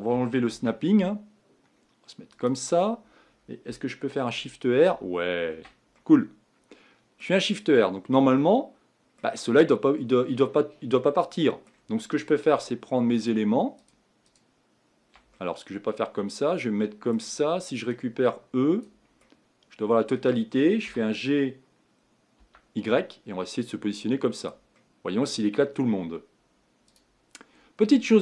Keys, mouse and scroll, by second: 2.9-4.4 scroll down 2, 4.4 shift+r, 4.9 shift+r, 6.0-13.3 middle drag, 13.3 shift+click, 13.9 shift+click, 15.3-18.9 middle drag, 18.9 click, 19.2-20.9 middle drag, 20.9 g, 24.8-27.0 middle drag, 27.0 click, 27.8-28.2 scroll down 3.